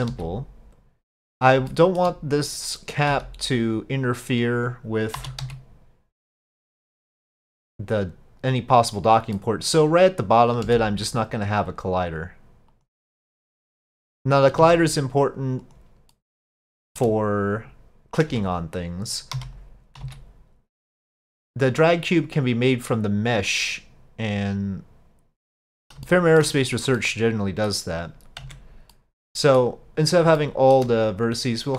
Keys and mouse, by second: 0.1 s, 1.8 shift+drag, 3.1 s, 5.2 s, 8.0 click, 9.4 middle click, 10.7 s, 13.8 click, 14.6 s, 16.1 middle click, 16.8 shift+click, 18.3 Tab, 19.4 3, 20.0 s, 21.8-25.5 drag, 26.1 shift+middle click, 27.1 middle click, 28.5 Tab, 28.9 middle click, 30.4-30.8 shift+middle drag.